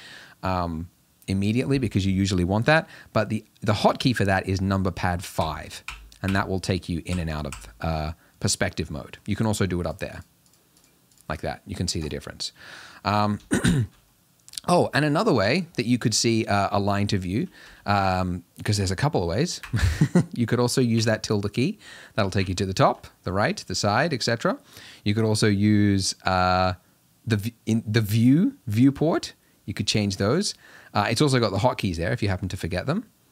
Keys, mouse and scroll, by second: 5.4-7.5 typing, 8.8-9.8 middle drag, 9.8 click, 10.1 click, 10.4 click, 10.7 click, 11.1 click, 12.0 click, 12.6-19.7 middle drag, 21.9 `, 23.1 `, 24.0 `, 25.7 `, 29.1 `, 31.8 `, 32.6 `.